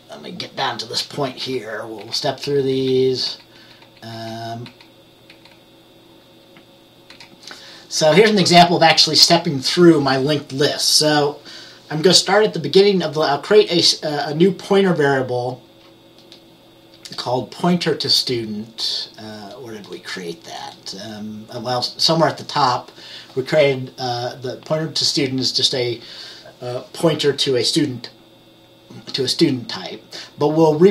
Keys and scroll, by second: 1.5 F10, 2.1 F10, 2.6 F10, 3.0 F10, 3.3 F10, 3.7 F10, 3.9 F10, 4.2 F10, 4.7 F10, 5.4 F10, 7.2 F10.